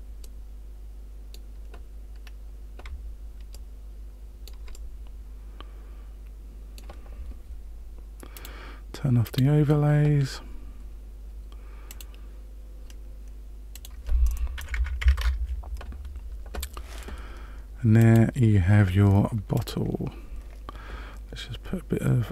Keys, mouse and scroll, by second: 0.2 middle click, 2.2-2.5 scroll up 1, 3.5 shift+middle click, 4.7 middle click, 8.3 click, 9.2 click, 11.8 click, 13.7 click, 18.0 click, 19.5 click.